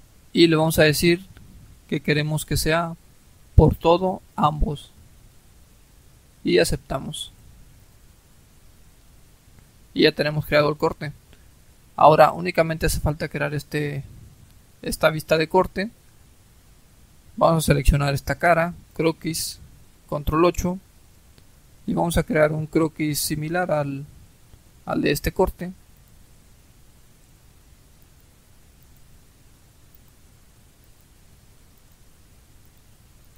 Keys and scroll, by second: 20.1 ctrl+8.